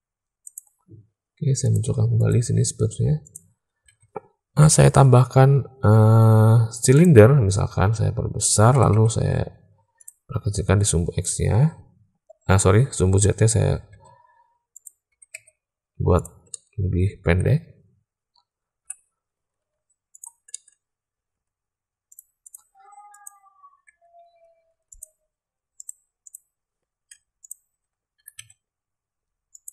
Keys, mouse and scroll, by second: 1.6 click, 2.1 click, 3.1 click, 3.8 alt+a, 4.5 shift+a, 7.6 s, 8.6 s, 10.7-11.2 drag, 13.8 s, 15.0 s, 16.4-17.3 drag, 18.8 /, 19.6 z, 20.4 click, 21.2 Tab, 22.0 click, 22.4 click, 23.1 click, 23.8 Tab, 24.2 Tab, 24.6 Tab, 24.9 click, 25.7 click, 26.2 click, 27.1 Tab, 27.4 click, 28.1 e.